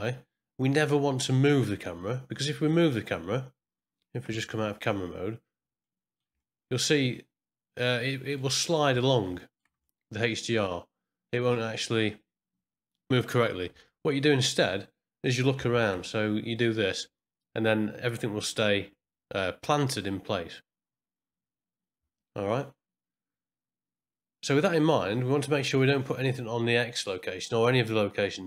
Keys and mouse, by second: 4.2 KP_0, 5.9 middle click, 6.4-8.4 shift+middle drag, 8.6 middle click, 9.0 ctrl+middle click, 9.4 shift+middle click, 9.9 shift+middle click, 10.7 middle click, 11.5-13.1 shift+middle drag.